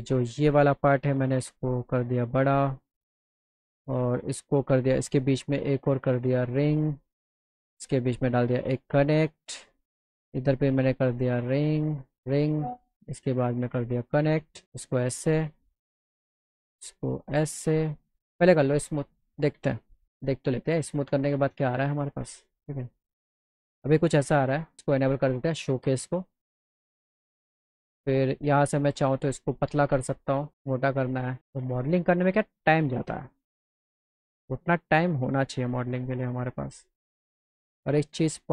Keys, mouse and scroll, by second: 0.7 click, 1.6 click, 3.6 click, 4.5 click, 6.5 click, 8.2 click, 9.0 alt+click, 9.0 alt+right click, 10.3 alt+click, 10.9 alt+click, 13.5 click, 14.3 alt+middle click, 15.4 click, 16.7 click, 17.6 alt+click, 17.6 alt+right click, 18.3 click, 18.7 click, 19.2 click, 22.0 click, 24.9 click, 25.7 click, 28.3 click, 30.2 click, 30.8 alt+middle click, 32.3 click, 34.0 click, 36.0 click, 36.5 click, 37.8 click, 38.2 click.